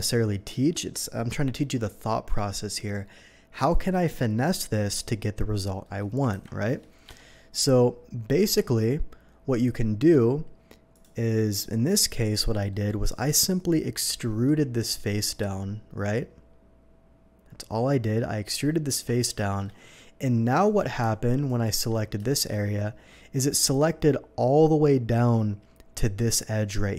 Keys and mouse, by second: 6.3 ctrl+b, 7.0 Escape, 8.4 Tab, 14.5 e, 17.4 click, 18.9 Tab, 19.4 shift+Tab, 22.2 shift+click, 23.0 right click.